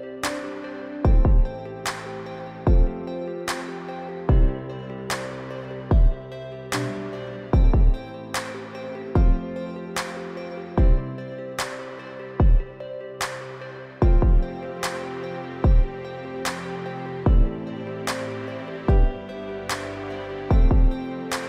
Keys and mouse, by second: 4.1-4.5 middle drag, 5.0 shift+middle click, 5.8-7.1 middle drag, 8.4-9.9 shift+drag, 10.4-11.0 middle drag, 11.3-11.8 shift+middle drag, 12.0-13.0 middle drag, 13.1-13.5 middle drag, 14.1-15.5 middle drag, 16.1-16.5 shift+middle drag, 16.8 Tab, 18.9 Tab.